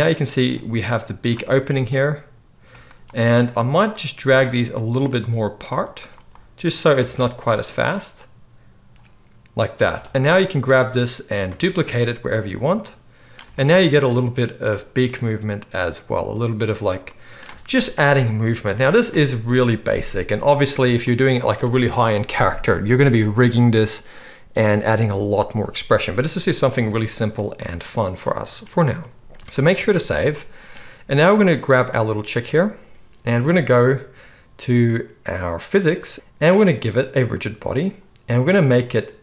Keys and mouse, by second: 1.3 space, 2.7 space, 4.2 g, 4.9 middle click, 5.1-6.1 drag, 5.7 g, 6.1 middle click, 6.4-12.3 drag, 7.0 space, 9.7 space, 11.6 shift+d, 12.3-12.7 middle drag, 12.7-32.0 drag, 13.5 space, 18.6 alt+a, 20.8 space, 26.7 space, 29.1 space, 29.5 ctrl+s, 29.7 ctrl+s, 32.0-35.7 middle drag, 35.7 click, 35.9 middle drag, 36.1-39.2 drag.